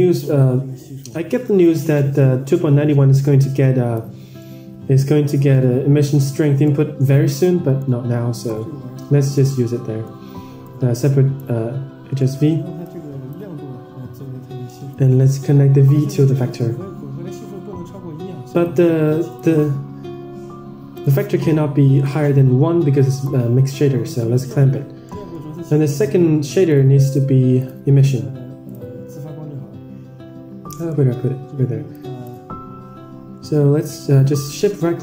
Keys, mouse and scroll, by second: 2.8-4.2 drag, 4.8-6.2 middle drag, 6.2-7.1 scroll down 10, 7.1-7.7 middle drag, 8.4-9.3 drag, 9.4-9.9 middle drag, 10.5-11.3 drag, 11.7-12.1 scroll up 5, 12.1 middle drag, 12.8 click, 13.5-14.8 scroll up 6, 14.8-15.6 drag, 22.5-23.7 drag, 24.1 middle click, 25.0 middle click, 25.5 shift+a, 30.7 scroll up 4, 30.7 shift+a, 30.8 middle click, 31.8 click, 34.5 middle click.